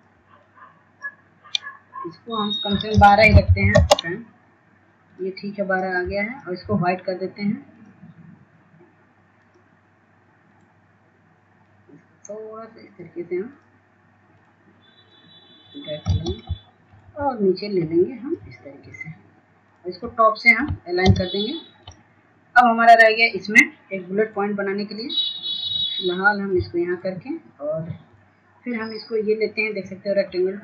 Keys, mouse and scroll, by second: 0.3 ctrl+space, 1.0-2.5 drag, 3.2 shift+click, 6.3 ctrl+a, 6.6 KP_1, 8.3 click, 9.0 right click, 9.5-19.4 shift+drag, 20.2 shift+click, 23.6-30.1 shift+drag.